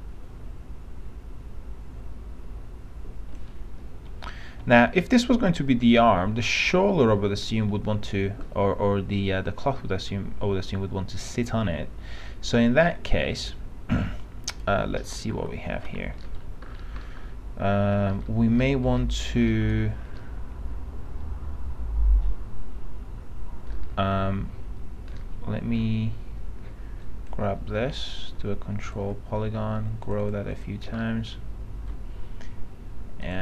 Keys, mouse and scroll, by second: 4.3 F3, 4.8 F3, 5.9 F3, 13.0 middle click, 13.5-15.5 scroll up 1, 15.5 p, 16.1 z, 16.3-17.1 scroll down 1, 17.8 alt+middle click, 18.3 middle click, 19.9 alt+F3, 20.3-23.9 alt+middle drag, 25.4 alt+middle click, 27.2 click, 30.3 click, 31.2-32.4 alt+middle drag.